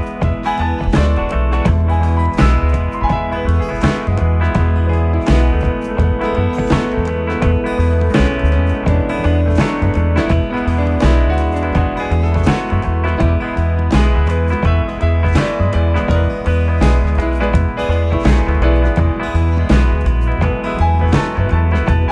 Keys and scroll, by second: 0.8 Escape, 2.3 Escape, 8.0 ctrl+z, 9.4 ], 10.6 4, 12.0 3, 12.5 ], 15.2 Escape.